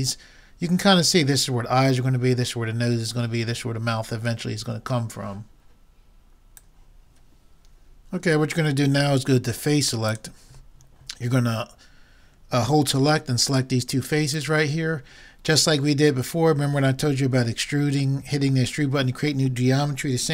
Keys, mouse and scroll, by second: 10.1-11.9 drag, 11.9 middle click, 13.5-16.2 drag, 16.2 middle click.